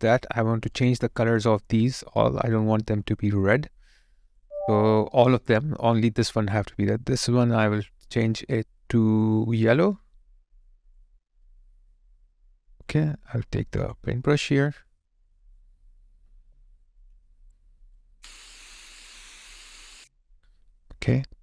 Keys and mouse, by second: 4.3 double click, 16.5 alt+right click, 19.8 alt+right click, 19.9 alt+click.